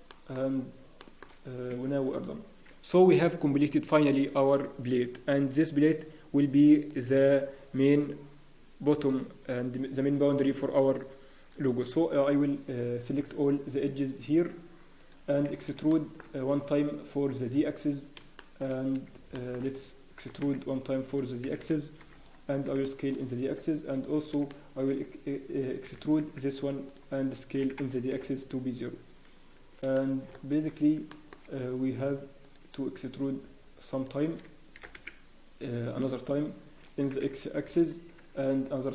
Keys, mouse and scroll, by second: 0.1 shift+middle click, 1.0 shift+middle click, 1.4 scroll down 5, 1.5 scroll up 1, 1.7 Tab, 1.7-3.4 scroll down 2, 14.2 click, 15.0 alt+click, 15.5 scroll up 1, 15.9 shift+middle click, 16.4 scroll down 1, 16.8 scroll up 3, 18.3 shift+middle click, 18.7 scroll down 1, 19.3 shift+middle click, 19.3 scroll up 1, 19.7-20.2 scroll down 1, 20.2-20.6 scroll up 2, 20.2 e, 21.4-22.4 scroll down 2, 21.4 s, 22.5 scroll down 1, 22.8 shift+middle click, 23.1-23.5 scroll up 1, 23.9 alt+click, 23.9 scroll down 3, 24.5 shift+middle click, 26.6 e, 27.2 scroll down 1, 27.5 s, 29.9 shift+middle click, 30.3 scroll up 1, 31.1 shift+middle click, 32.4 click, 33.9 alt+click, 34.2-34.6 scroll down 1, 34.7 e, 36.2 scroll down 4, 37.0 s.